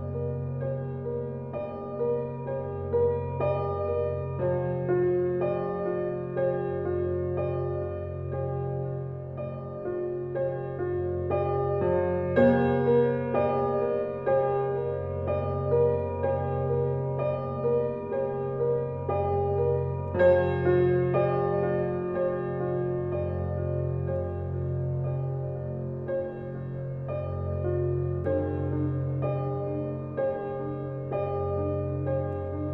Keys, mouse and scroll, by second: 0.1 x, 0.7 click, 1.5 x, 2.2 ctrl+alt+z, 3.2 click, 5.4 x, 5.6-9.8 drag, 9.8 space, 10.0 click, 10.4 space, 10.9-18.4 drag, 18.4 ctrl+alt+scroll down 1, 19.0 ctrl+alt+scroll down 1, 21.3 ctrl+alt+scroll up 1, 21.9 ctrl+alt+scroll down 1, 22.8 ctrl+alt+scroll up 1, 23.7 click, 24.3 ctrl+alt+z, 24.6 x, 25.0 click, 28.1 x, 28.4 click, 29.9 ctrl+alt+scroll down 1, 31.4 alt+click.